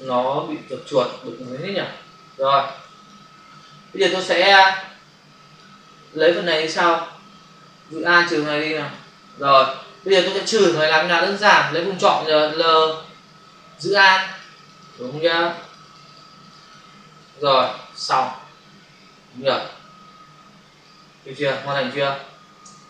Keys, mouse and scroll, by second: 2.3 space, 8.1 alt+click, 10.1 space, 10.2 click, 10.4 space, 12.4 click, 12.5 click, 14.0 alt+click, 14.1 alt+click, 14.3 alt+click, 14.5 alt+click, 14.6 alt+double click, 14.8 alt+click, 14.9 alt+click, 15.0 alt+double click, 15.2 alt+click, 15.5 alt+double click, 15.6 alt+click, 15.9 alt+double click, 16.1 alt+click, 16.4 alt+double click, 16.6 alt+click, 17.6 ctrl+0, 19.4 ctrl+-, 20.8 ctrl+space, 21.6 space.